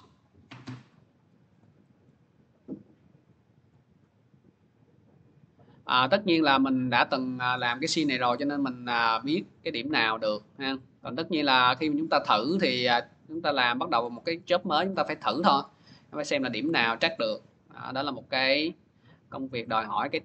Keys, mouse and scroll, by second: 1.4 click, 1.4 scroll, 2.0 scroll, 2.1 middle click, 3.5 click, 5.6 middle click, 5.6 click, 7.4 click, 9.7 click, 11.3 click, 14.3 click, 15.3 middle click, 16.6 scroll, 19.5 click, 19.5 scroll.